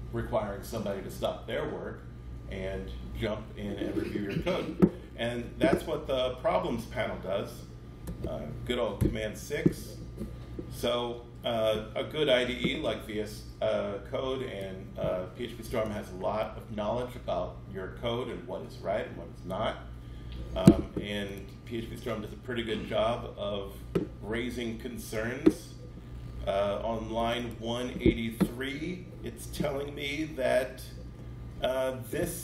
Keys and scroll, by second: 8.9 super+6.